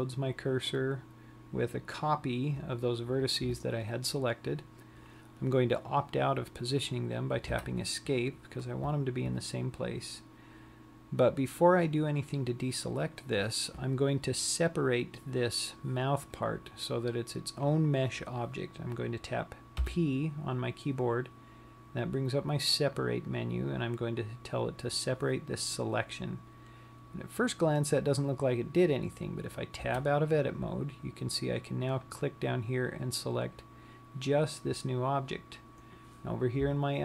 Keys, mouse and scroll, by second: 20.3 p, 30.4 Tab, 32.5 click.